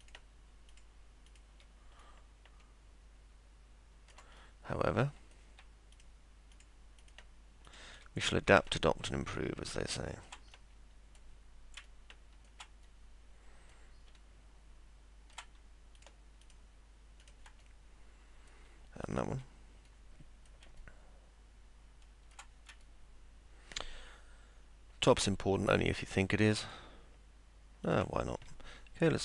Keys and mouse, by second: 0.0 ctrl+click, 0.7 ctrl+click, 1.3 ctrl+click, 2.0-4.1 alt+middle drag, 4.4 middle click, 5.9 ctrl+click, 6.5 ctrl+click, 7.7 ctrl+click, 8.7-10.4 alt+middle drag, 11.0 middle click, 11.8 alt+middle click, 12.8 middle click, 14.1-15.3 alt+middle drag, 16.4 ctrl+click, 17.2 ctrl+click, 17.6 middle click, 19.0 ctrl+click, 19.8 middle click, 20.8-22.3 alt+middle drag, 22.8-25.1 alt+middle drag, 26.1 ctrl+click, 27.8 ctrl+click.